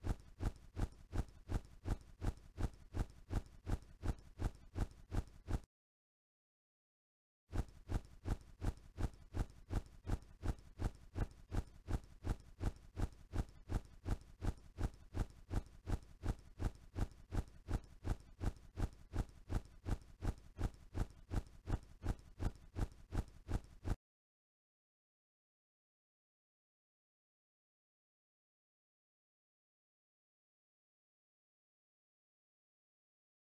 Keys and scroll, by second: 2.7 s, 6.7-9.1 typing, 10.8 c, 12.2 m, 12.9 d, 23.8 n, 25.9 a.